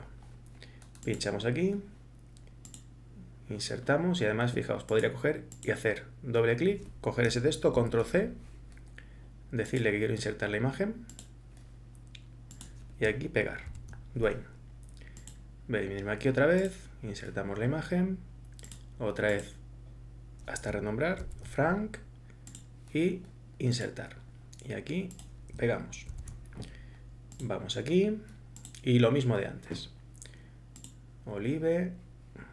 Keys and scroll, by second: 7.8 ctrl+c, 13.7 ctrl+v, 21.2 ctrl+c, 26.1 ctrl+v.